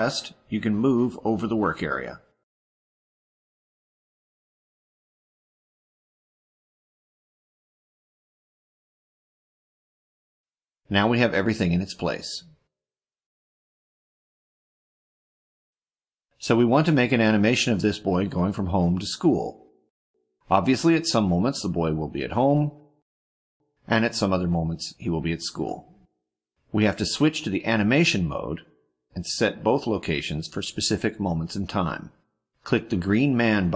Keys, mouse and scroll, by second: 3.5-4.8 middle drag, 5.2 click, 6.5 click, 7.6 click, 8.3 click, 8.7 click, 9.4 click, 11.2-12.1 ctrl+scroll down 6, 12.5 ctrl+middle click, 14.2 click, 15.8 middle click, 16.8-17.3 ctrl+scroll down 2, 17.3 ctrl+middle click.